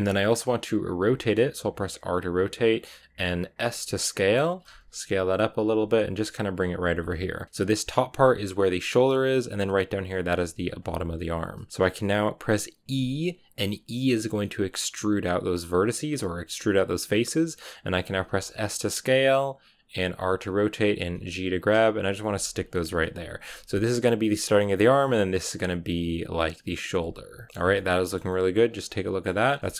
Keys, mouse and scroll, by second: 0.8 r, 4.6 s, 5.5 g, 6.4 r, 6.8 g, 10.4 r, 10.7 g, 12.7 e, 18.0 s, 19.9-22.6 typing, 23.6 g, 26.9 g, 27.5 scroll down 1, 27.7 middle click, 28.0 scroll down 1, 28.2-29.4 middle drag, 29.4 scroll down 2, 29.5-29.7 shift+middle drag.